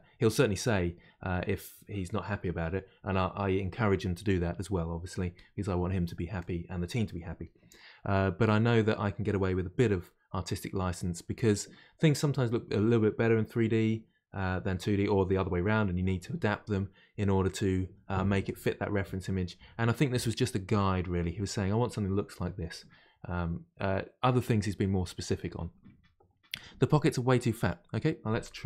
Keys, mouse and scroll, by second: 26.7-28.5 middle drag, 28.5 Tab.